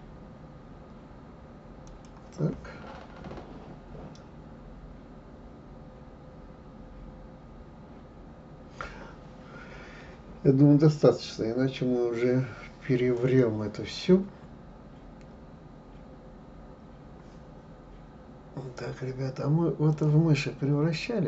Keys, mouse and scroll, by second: 13.1 click, 19.9-21.2 drag.